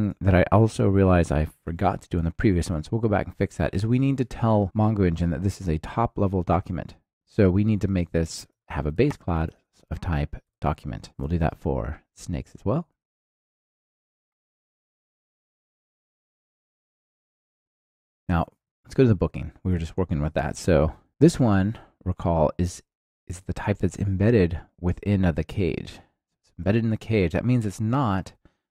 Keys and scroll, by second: 8.9 Return, 11.0 ctrl+alt+shift+Left, 11.4 super+c, 15.4 super+v, 21.0 ctrl+alt+shift+Left, 21.3 super+c.